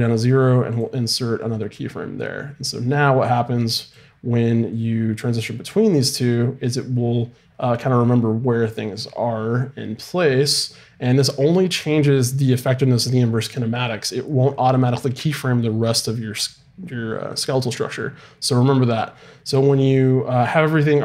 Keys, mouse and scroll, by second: 0.2-1.8 right drag, 2.2-6.6 drag, 19.9-21.0 right drag.